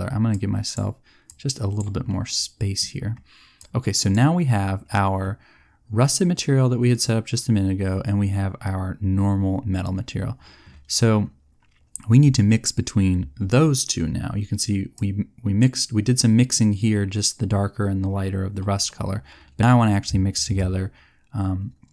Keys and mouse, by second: 3.5 click.